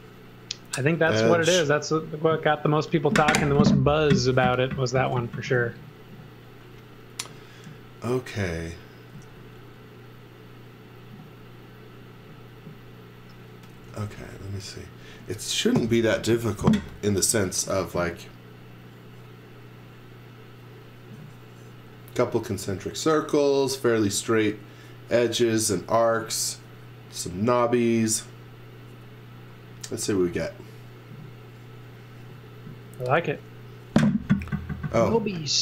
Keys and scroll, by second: 9.1 z, 13.8 x, 14.0 v.